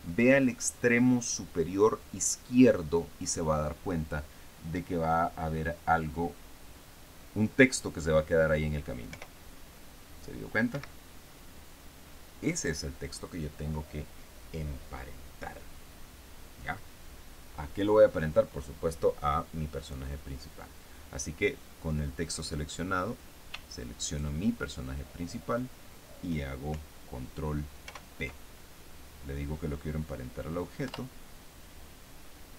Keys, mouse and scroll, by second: 9.5 p, 11.2 Escape, 24.5 shift+right click, 28.3 ctrl+p, 31.3 Return.